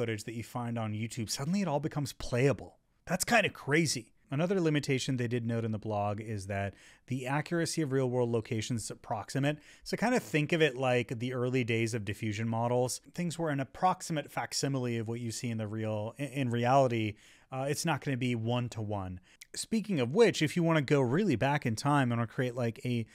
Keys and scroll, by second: 10.4 Up, 11.6 Up, 12.5 Left, 13.1 Right, 13.9 Down, 14.3 Up, 14.5 Left, 15.1 Up, 16.7 Left, 17.7 Down, 18.3 Right, 19.3 Up.